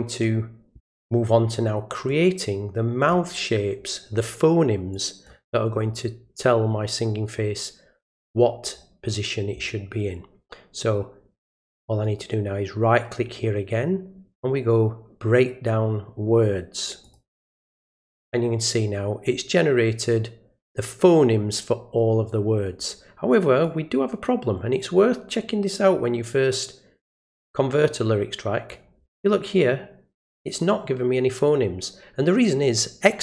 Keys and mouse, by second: 2.1-3.1 drag, 4.9-5.3 drag, 12.0 right click, 17.0 click, 23.6-28.7 drag.